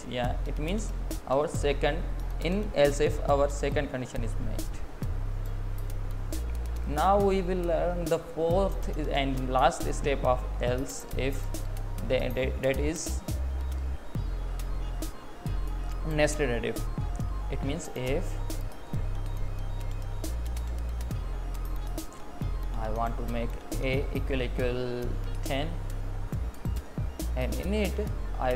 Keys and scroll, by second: 9.5 Up, 9.9 Down, 16.8 space, 19.5 Left, 19.9 Right, 21.6 Left, 26.1 Right, 27.1 Up.